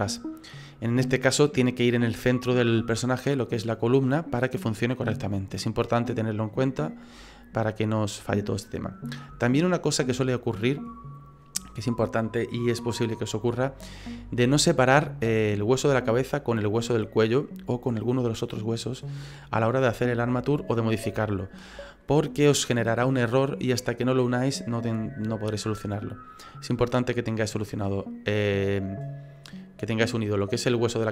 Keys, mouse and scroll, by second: 3.5 middle click, 4.8 middle click, 7.2-8.6 scroll down 3, 8.6 middle click, 9.3 shift+scroll up 1, 9.4 shift+middle click, 9.9-10.4 scroll up 5, 12.5-13.5 scroll up 1, 15.6 right click, 16.4 right click, 18.0-19.0 scroll down 3, 18.4 middle click, 20.1 middle click, 21.1 middle click.